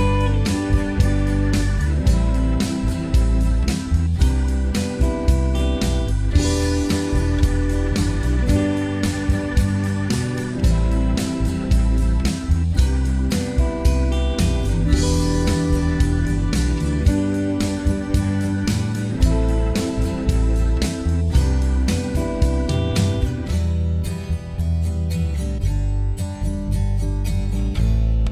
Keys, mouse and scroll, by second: 0.0 alt+click, 0.2 alt+middle click, 0.2-1.4 alt+drag, 1.4 g, 1.5 f, 1.6-3.1 drag, 3.1 alt+middle click, 3.5 f, 3.5-4.8 drag, 4.8 alt+middle click, 4.9 shift+click, 5.3 middle click, 5.3 scroll up 1, 5.5 shift+click, 5.6 alt+middle click, 6.3 click, 6.5-7.8 alt+middle drag, 7.8-11.2 drag, 11.2 scroll up 2, 11.3 alt+shift+click, 11.8 alt+middle click, 11.9 shift+click, 12.8-14.4 drag, 14.4 g, 14.5 f, 14.6 alt+click, 15.6 f, 15.8 click, 16.0 f, 16.3-21.4 alt+shift+drag, 21.5 click, 22.0 f, 22.1-23.5 alt+drag, 23.5 f, 23.6-25.2 shift+drag, 25.2-27.1 scroll down 4, 27.1-27.9 scroll down 1, 28.1 scroll down 4, 28.2 alt+middle click.